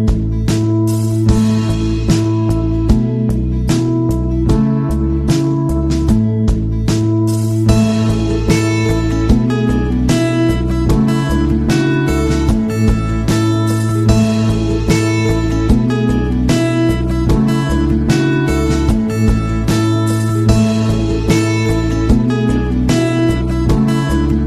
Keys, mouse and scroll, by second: 5.6 click, 7.4 click, 8.5-12.0 typing, 13.5 space, 15.1-21.3 typing.